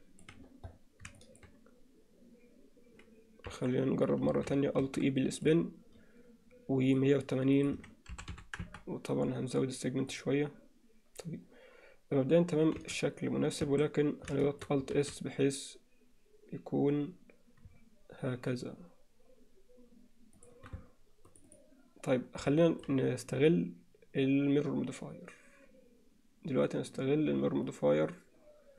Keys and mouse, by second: 1.2 shift+middle click, 3.5 KP_1, 4.3 a, 4.8 alt+e, 6.9 click, 7.6-9.6 drag, 10.1 click, 12.8 z, 13.7 a, 14.4 shift+middle click, 15.0 alt+s, 21.3 click, 22.6 shift+middle click.